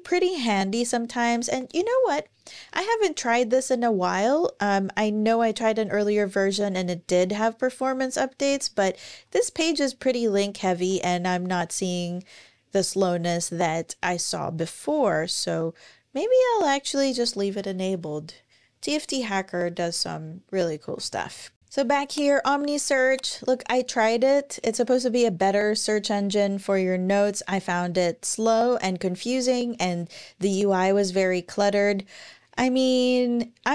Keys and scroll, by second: 20.6 super+,.